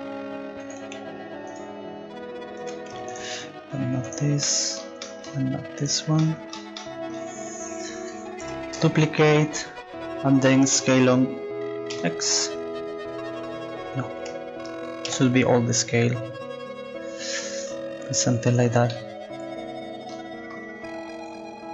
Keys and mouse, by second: 3.1-4.6 right drag, 4.7-6.4 drag, 7.0-8.0 drag, 8.4 shift+d, 10.7 s, 15.1 s, 21.3-21.7 drag.